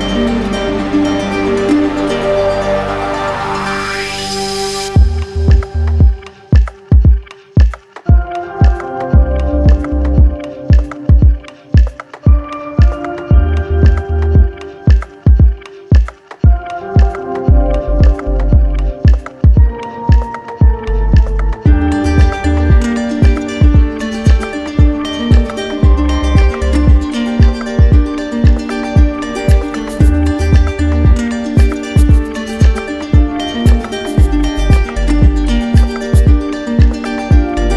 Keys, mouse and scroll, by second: 2.1-3.2 drag, 8.0-9.0 drag, 8.9-9.5 typing, 10.3 Return, 18.9-21.0 drag, 25.0 alt+click, 26.2 click, 26.7 shift+click, 27.2 alt+click, 33.0 alt+click, 34.5 click.